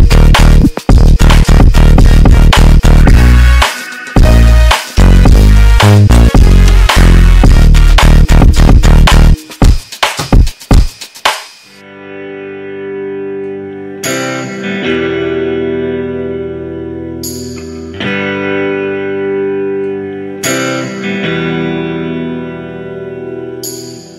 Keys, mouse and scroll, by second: 3.3 click, 5.0 g, 10.0 g, 20.2-22.5 drag.